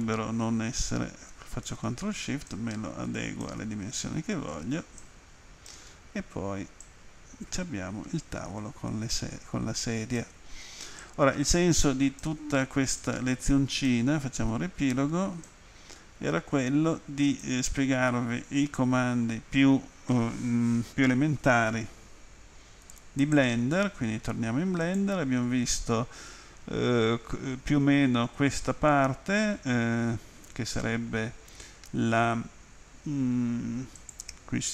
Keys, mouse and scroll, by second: 5.0 click, 6.9 ctrl+click, 11.0 alt+click, 13.0 alt+click, 15.5 ctrl+click, 23.3 click, 24.9 click, 25.0 click, 34.0 click.